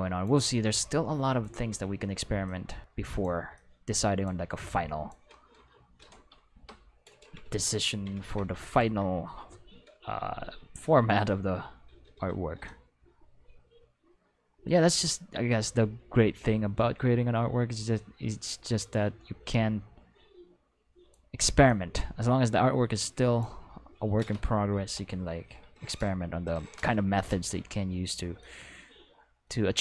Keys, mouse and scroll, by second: 0.7 click, 2.4 click, 3.6 click, 4.6 click, 6.5 Return, 12.7-18.8 drag, 19.5-21.1 drag, 21.7-23.4 drag, 24.8 Return, 28.4-29.8 drag.